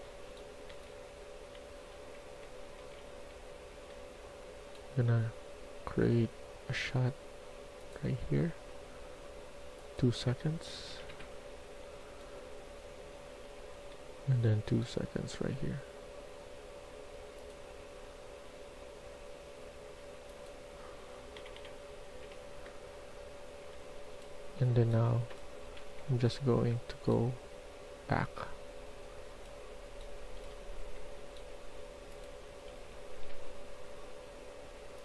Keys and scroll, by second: 0.0-2.2 typing, 3.5-4.2 typing, 7.7-8.7 typing, 10.8 2, 11.0 Return, 11.7-13.1 d, 13.8 e, 15.3 typing, 17.6 typing, 22.1 2, 23.5-26.2 typing, 30.0-30.8 typing, 32.4 s, 32.7 s, 33.2 s.